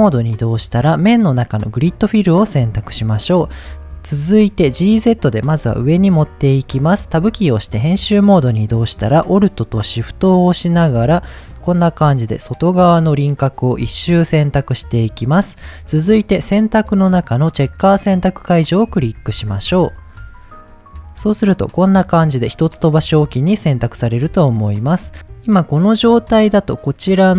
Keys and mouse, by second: 1.1-2.2 drag, 4.1 Tab, 5.4 g, 5.6 z, 6.4 drag, 6.9-7.2 middle drag, 7.2 Tab, 10.3 alt+click, 16.3-18.6 drag, 19.3 KP_7.